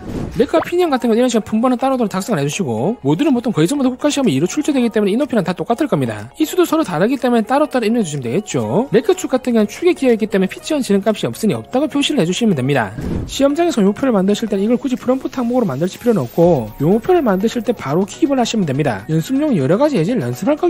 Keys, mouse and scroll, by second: 13.6 click.